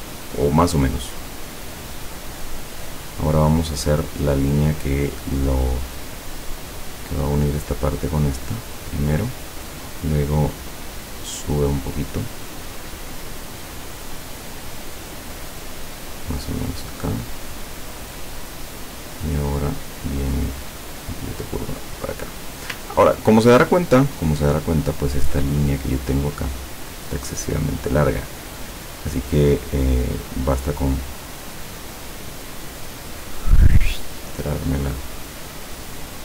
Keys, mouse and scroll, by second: 1.0-2.8 drag, 4.6 click, 7.5 click, 9.1 click, 16.1 click, 18.0 click, 20.1 click, 21.5 click, 23.1 ctrl+scroll down 2, 23.8 ctrl+middle click, 26.2 click, 27.2 click, 31.7 click, 32.6-36.2 drag.